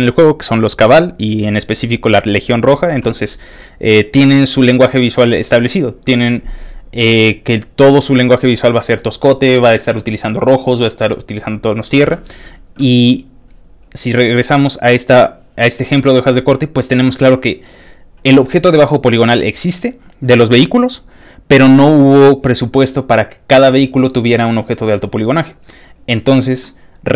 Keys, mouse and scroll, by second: 0.7 click, 0.8-1.2 scroll down 1, 1.6 click, 13.2 click, 13.8 click, 14.7 click, 25.9 click.